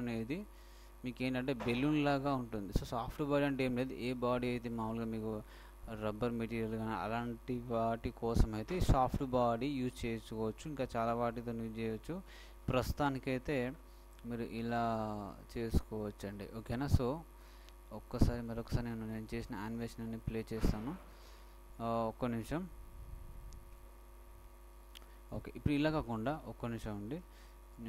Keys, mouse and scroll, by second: 1.4 middle click, 1.9-3.1 drag, 9.7-11.4 middle drag, 14.9-16.5 right drag, 18.8 shift+middle click, 19.6-21.3 shift+middle drag, 25.9 Escape, 26.0 Escape.